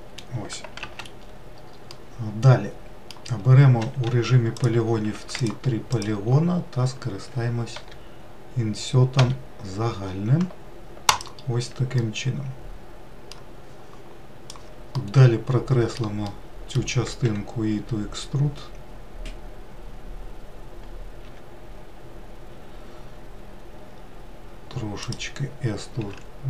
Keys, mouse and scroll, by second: 0.0-1.4 middle drag, 1.4 alt+z, 2.6-4.7 middle drag, 4.7 3, 5.2 click, 6.0 shift+click, 6.5 shift+click, 8.4 i, 12.6-15.6 middle drag, 15.9-18.1 middle drag, 18.1 e.